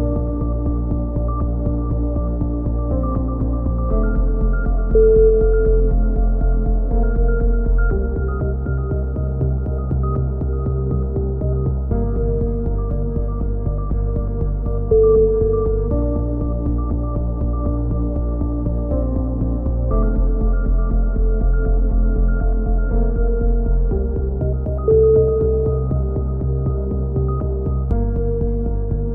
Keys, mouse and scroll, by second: 0.0 a, 0.2 middle click, 0.4 click, 2.7 middle click, 2.8 KP_3, 3.2 z, 8.6 k, 10.5 click, 11.0 k, 11.4-12.6 middle drag, 13.2 k, 16.9 KP_3, 17.7 z, 18.0 z, 18.2 click, 18.9 g, 20.6 a, 21.0 k, 23.2 click, 24.8 g, 27.0 click, 27.7 right click, 27.7 g.